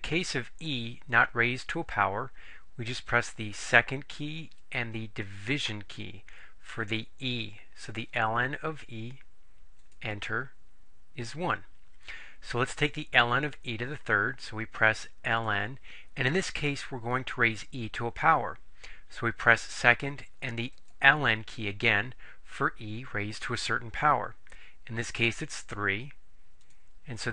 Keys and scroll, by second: 9.9 Return, 25.7 3, 26.7 Return.